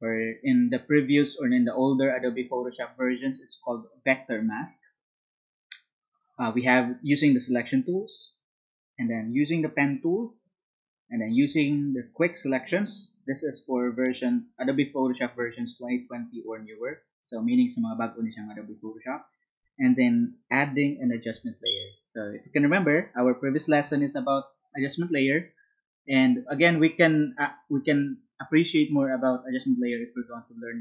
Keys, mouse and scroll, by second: 23.5 Up, 26.4 Down, 28.3 Up, 30.3 Down.